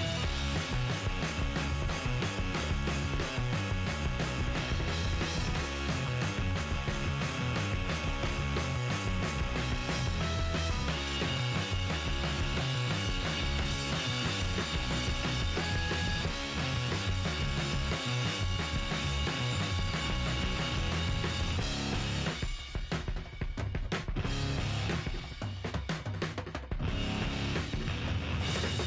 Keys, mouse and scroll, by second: 2.7-12.4 middle drag, 2.7-5.2 right drag, 7.2-8.4 drag, 8.4-11.4 right drag, 10.9 g, 13.1-15.0 right drag, 13.3-18.7 middle drag, 13.6 g, 17.7-21.1 right drag, 19.6-21.6 middle drag, 19.8 g, 21.7-22.7 right drag, 22.2-24.3 middle drag, 22.5 g, 25.8-28.3 middle drag, 27.7 g, 28.4 middle click.